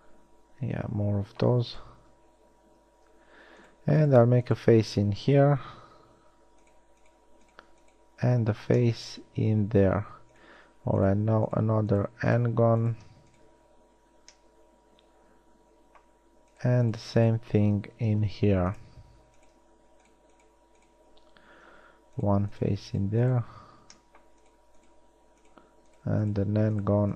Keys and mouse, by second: 1.5 middle click, 6.0 f, 8.5 f, 14.0 f, 18.3 x, 21.9 f, 23.8 f.